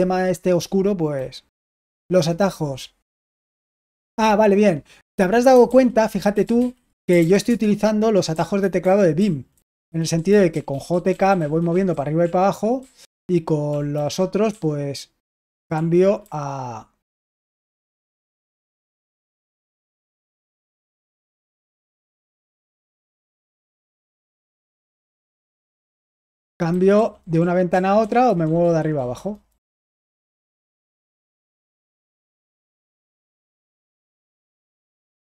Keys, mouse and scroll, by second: 1.1 typing, 5.6 super+h, 6.0-15.6 typing, 17.2-19.1 typing, 20.7-29.4 typing, 30.4-31.2 typing, 33.7-35.3 typing.